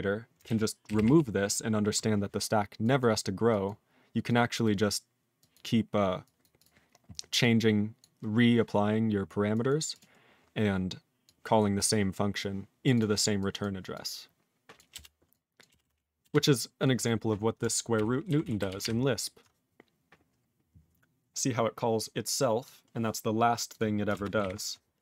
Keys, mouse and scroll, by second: 0.4 ctrl+a, 0.8 ctrl+k, 0.9 ctrl+k, 1.0 ctrl+p, 2.8 click, 3.0 click, 3.5 click, 3.6 click, 4.3 click, 4.6 click, 5.4 click, 5.5 click, 6.2 click, 6.4 click, 6.6 click, 7.4 click, 8.0 click, 8.9 scroll down 2, 9.5 click, 9.6 click, 9.9 click, 9.9 click, 10.1 scroll down 2, 11.2 click, 11.5 click, 11.7 click, 11.8 click, 12.4 click, 12.8 click, 12.9 click, 12.9 click, 13.4 click, 13.6 click, 13.9 click, 14.7 click, 14.9 BackSpace, 15.3 click, 15.6 click, 15.7 BackSpace, 15.8 BackSpace, 16.2 BackSpace, 16.8 click, 17.0 click, 17.9 ctrl+g, 18.5 ctrl+s, 18.7 ctrl+=, 22.0 click, 22.6 click, 23.7 click, 23.7 click, 24.1 ctrl+space, 24.4 ctrl+alt+b.